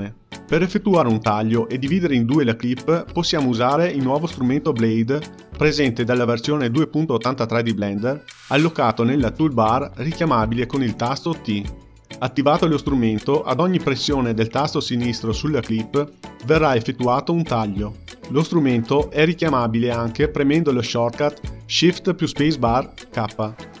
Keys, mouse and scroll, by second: 0.0-0.4 drag, 0.4 space, 3.0 space, 3.7 space, 4.6 space, 7.7 t, 10.0-14.9 drag, 17.1 click, 17.9 click, 19.0 click, 21.4-23.8 drag.